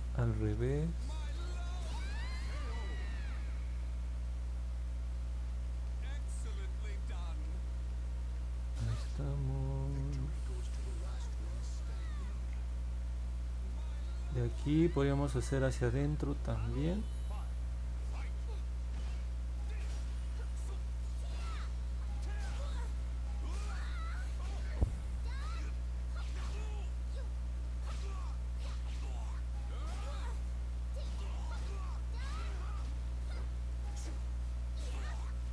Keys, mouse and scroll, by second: 0.7 click, 1.2 click, 2.0 click, 2.5 click, 3.3 click, 3.8 click, 4.3 click, 4.8 click, 5.3 click, 5.9 click, 6.4 click, 6.9 click, 7.5 click, 8.0 click, 9.9 click, 10.2 click, 10.6 click, 10.9 click, 12.3 click, 14.7 click, 15.2 click, 15.7 click, 16.2 click, 17.3 click, 20.2 click, 20.7 click, 22.5 click, 23.0 click, 23.8 click, 24.3 click, 24.9 click, 25.9 click, 27.3 click, 28.0 click, 28.5 click, 29.0 click, 29.5 click, 30.0 click, 30.5 click, 31.3 click, 31.8 click, 33.3 click, 33.8 click, 34.4 click, 34.9 click, 35.4 click.